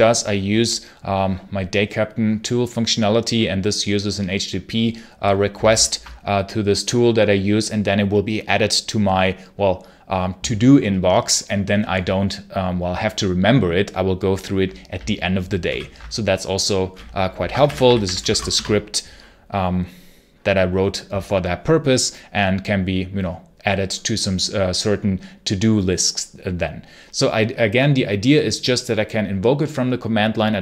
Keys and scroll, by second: 5.6 ctrl+super+h, 15.5 ctrl+super+l, 17.1-18.7 typing.